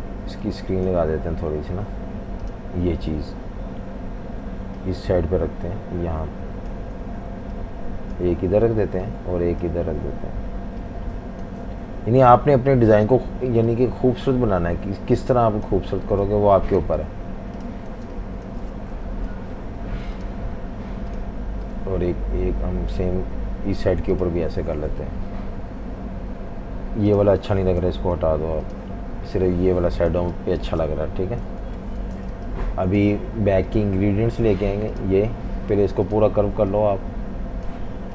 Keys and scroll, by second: 2.1 v, 18.0 typing, 19.1 super+-, 27.8 Delete, 28.9 Delete, 30.1 v, 30.3 space, 31.5 super+-, 31.6 super+-, 32.2-33.0 typing.